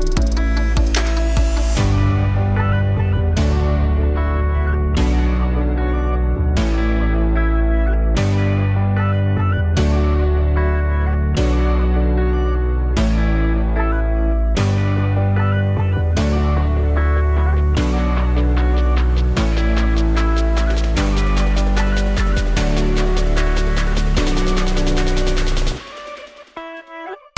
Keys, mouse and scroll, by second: 0.9-3.4 drag, 6.2-8.8 drag, 9.7 click, 16.4-16.8 scroll down 1, 16.8-18.5 middle drag, 18.5 click, 22.4-23.7 scroll up 1, 23.7-24.9 middle drag, 24.9-27.3 drag.